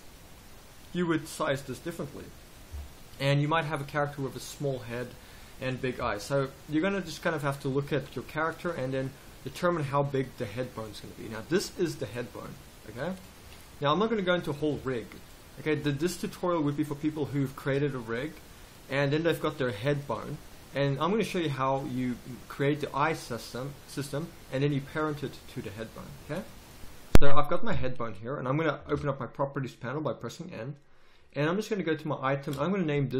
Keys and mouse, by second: 2.7 KP_3, 6.0 KP_3, 6.5 z, 7.2-9.1 right drag, 7.9 g, 9.6-14.1 drag, 11.5 g, 13.4 g, 14.1 middle click, 14.7 z, 18.2-23.0 middle drag, 27.7 KP_3, 28.9 n.